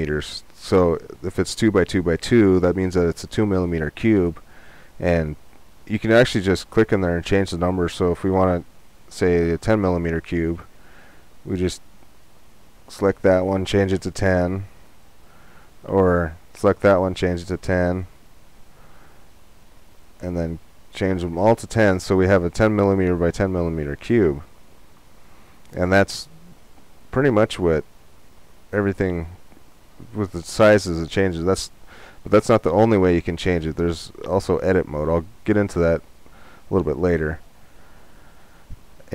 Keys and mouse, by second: 6.2-7.9 drag, 14.7-16.5 drag, 19.6-21.3 drag.